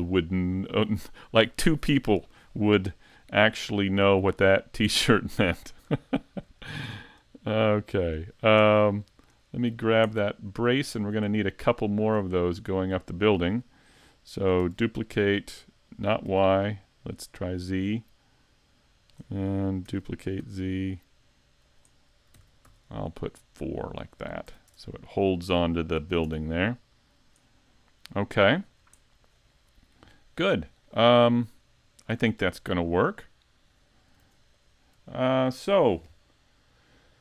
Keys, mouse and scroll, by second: 0.1 middle click, 2.7 scroll up 3, 3.2 scroll down 3, 3.6 shift+middle click, 4.5 middle click, 5.6 scroll up 1, 6.0 shift+middle click, 6.6 scroll up 2, 8.6 Tab, 9.3 right click, 9.8-10.1 shift+scroll down 2, 10.1 shift+middle click, 11.3 shift+middle click, 11.3-11.8 scroll down 1, 11.9 scroll down 1, 12.3 shift+middle click, 12.8 middle click, 14.6 shift+d, 18.0 click, 19.9 shift+d, 21.8 click, 22.3 shift+d, 24.0 click, 24.5 a, 24.7 Tab, 25.9 middle click, 26.2 Tab, 27.4 middle click, 29.0 shift+middle click, 31.2-31.7 scroll down 1, 31.7 shift+middle click, 32.4 scroll up 2, 32.8 middle click, 33.5-34.1 scroll down 1, 34.2 s, 35.1 shift+middle click.